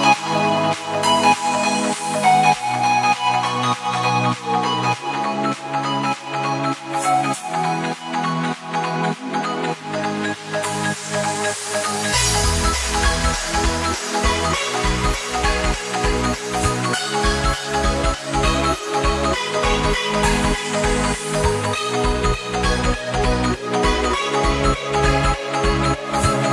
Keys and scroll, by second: 0.6 ctrl+space, 0.8 ctrl+space, 1.2 z, 1.7 ctrl+space, 1.9 ctrl+space, 2.0 z, 3.4 space, 5.7 ctrl+z, 10.3 z, 11.2 z, 13.0 space, 13.9 space, 15.4 space, 17.0 space, 18.1 space, 22.3 space, 23.2 space, 24.5 ctrl+space, 25.2 ctrl+space, 25.9 space, 26.1 ctrl+z.